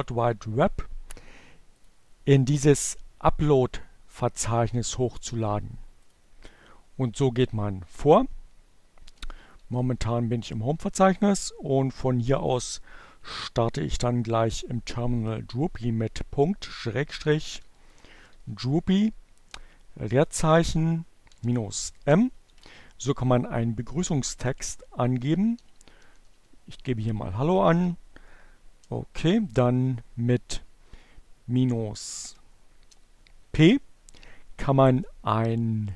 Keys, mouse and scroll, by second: 2.0 click, 5.6 click, 7.8-8.8 typing, 10.3-11.3 typing, 15.5-18.4 typing, 20.5-22.0 typing, 23.6 shift+h, 25.2-26.8 typing, 28.4 space, 31.1 p.